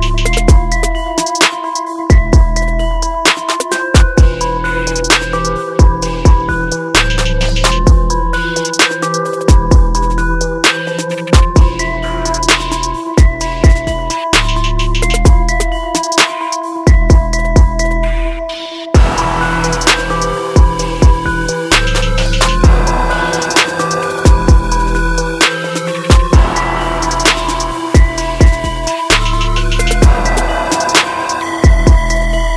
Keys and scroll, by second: 30.5 ctrl+-.